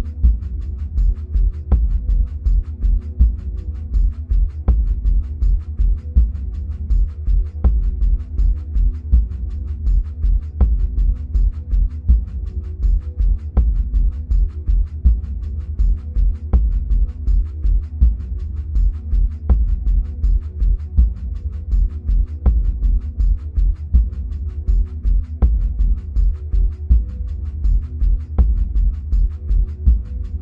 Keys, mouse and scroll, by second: 11.0 click, 17.4-18.1 scroll up 1, 18.1-18.8 scroll down 1, 18.8-22.6 middle drag, 20.8-21.4 scroll down 2, 22.6-30.4 drag, 27.7-29.5 scroll up 1, 30.2-30.4 scroll down 1.